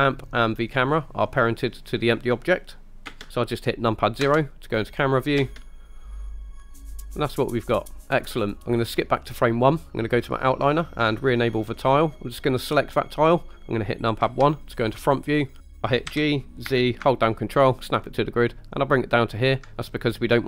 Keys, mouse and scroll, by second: 3.1 space, 4.3 KP_0, 5.5 space, 9.2 click, 11.5 click, 12.5 click, 14.3 KP_1, 15.0-15.4 scroll up 4, 15.6 scroll down 1, 16.2 g, 16.7 z, 19.5 ctrl+click, 19.7 middle click, 19.7 KP_1.